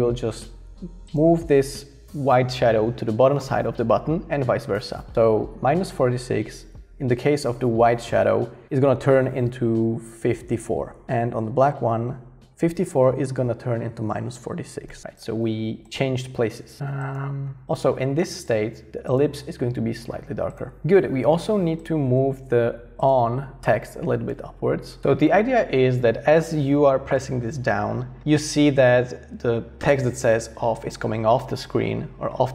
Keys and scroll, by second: 10.8-11.5 typing, 14.0-15.0 typing, 17.6 i.